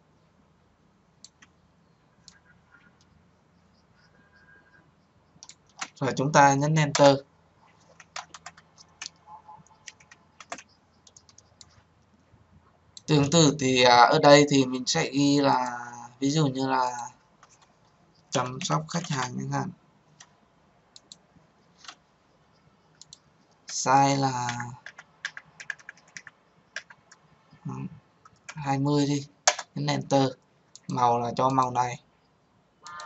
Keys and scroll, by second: 6.9 Return.